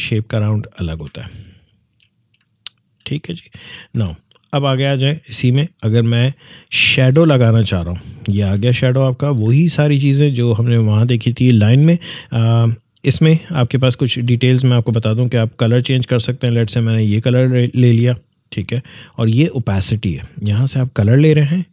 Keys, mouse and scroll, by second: 1.2 alt+scroll down 1, 2.5 alt+scroll down 1, 3.4 space, 3.6 click, 3.9 space, 7.5 click, 9.0-9.4 alt+scroll up 1, 14.5-20.7 drag.